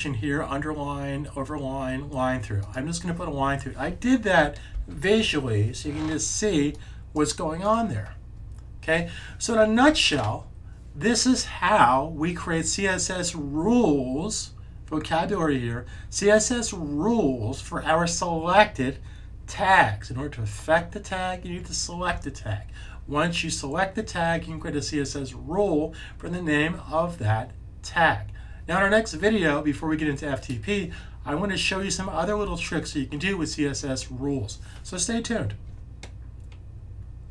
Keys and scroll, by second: 4.6 s.